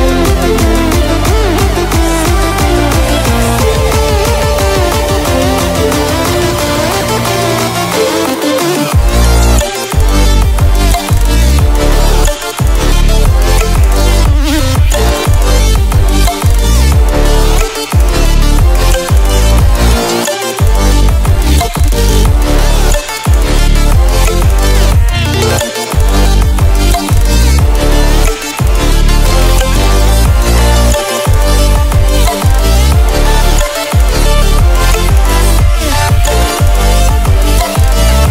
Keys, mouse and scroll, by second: 16.1 click, 19.1-19.4 ctrl+alt+scroll down 1, 20.6 click, 22.1 right click, 23.7 click, 26.6 click, 28.4 ctrl+w, 33.1 ctrl+w, 34.1-38.3 drag.